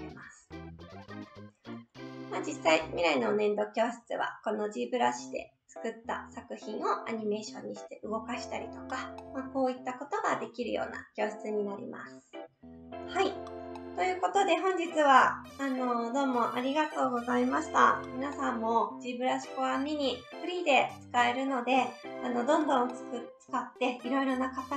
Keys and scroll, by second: 1.1 Right, 12.8 Right.